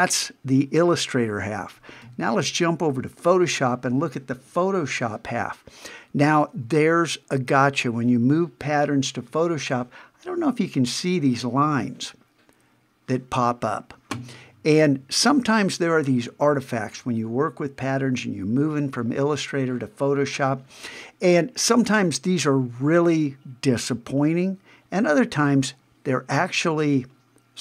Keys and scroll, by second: 2.0 super+Tab.